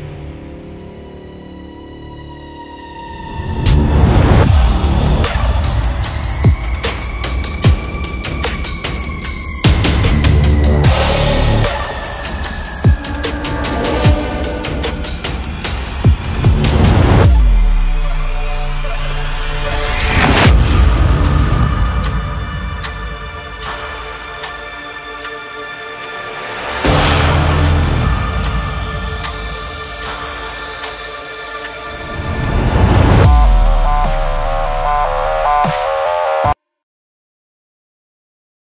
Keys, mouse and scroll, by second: 2.0 Return, 3.2-8.0 drag, 9.6-9.9 scroll up 1, 9.9-10.5 scroll down 1, 10.5 scroll down 1, 10.6-11.1 scroll up 2, 10.7 click, 11.7 space, 11.9 click, 12.0 space, 13.0 scroll down 1, 14.6 ctrl+b, 15.8-20.3 drag, 21.9 ctrl+m, 22.7-25.9 drag, 27.3 ctrl+0, 27.9 ctrl+-, 30.6 ctrl+-, 30.6 ctrl+=, 31.8 ctrl+-, 33.1 scroll up 1, 33.6 space, 33.8 click, 33.9 space, 34.1 scroll down 1, 34.6 space, 34.7 click, 34.9 space, 35.1 scroll down 1, 35.2 scroll up 1, 35.3 scroll down 1.